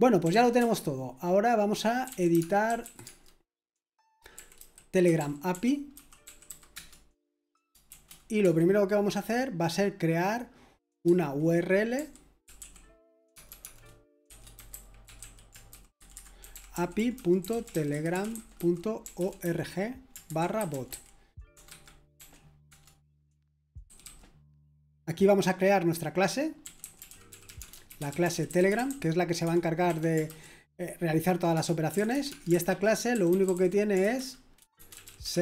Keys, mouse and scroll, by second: 0.0-8.4 typing, 11.7-24.3 typing, 21.7 Escape, 23.5 Escape, 26.4-30.3 typing, 29.4 Escape, 31.5-35.4 typing.